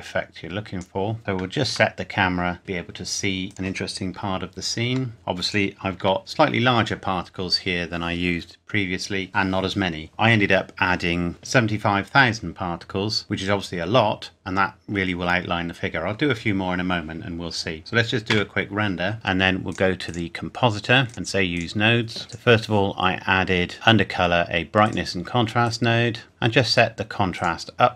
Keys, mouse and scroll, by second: 1.7 KP_0, 3.5 click, 4.8 g, 5.1 scroll up 1, 5.4 click, 6.0 g, 6.2 click, 11.3 click, 17.8 click, 18.3 F12, 19.7 click, 24.8 click, 26.1 scroll up 1, 27.3 click.